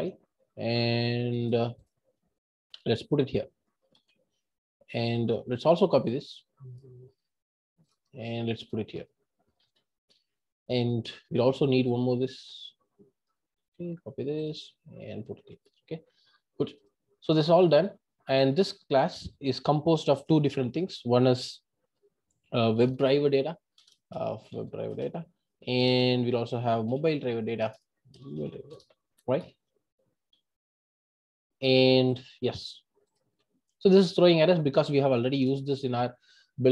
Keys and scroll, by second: 23.8 Return, 27.6 Return.